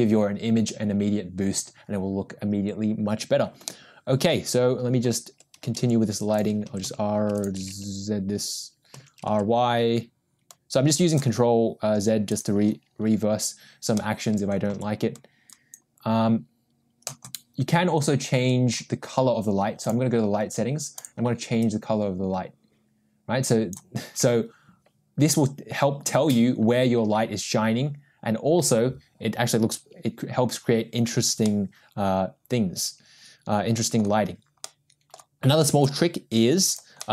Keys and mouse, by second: 3.6-4.3 middle drag, 6.4 g, 7.4 r, 8.5 ctrl+z, 9.2 r, 14.2-15.3 middle drag, 15.3 g, 20.9 click, 32.5-34.4 middle drag, 34.9-35.4 middle drag, 36.6 shift+d.